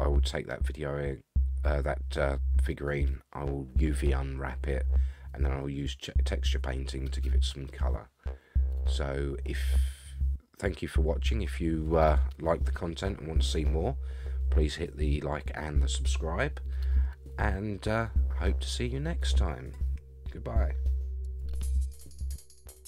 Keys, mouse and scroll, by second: 7.6-8.3 scroll down 4.